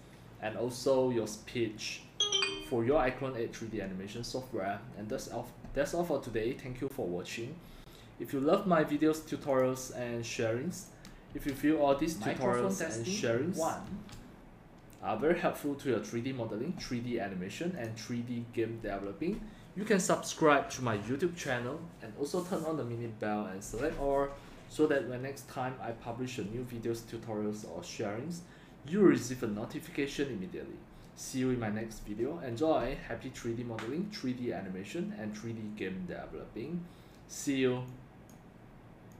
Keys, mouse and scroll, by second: 9.5 click, 10.8 click, 11.3 space, 13.9 space, 16.6-18.2 drag.